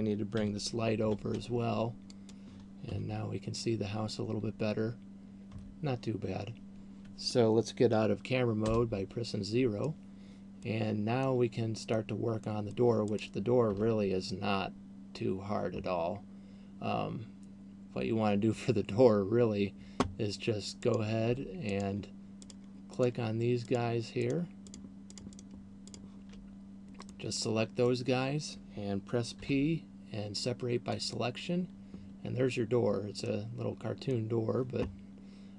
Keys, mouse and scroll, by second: 0.7 g, 2.4 click, 5.7 Escape, 8.7 KP_0, 10.2 middle click, 11.4 middle click, 12.4 middle click, 13.2 right click, 13.9 Tab, 20.9 right click, 21.9 shift+right click, 22.7 shift+right click, 22.9 shift+right click, 23.9 shift+right click, 24.7 shift+right click, 24.9 shift+right click, 25.2 shift+right click, 25.4 shift+right click, 26.2 shift+right click, 27.2 middle click, 29.2 p, 33.4 middle click.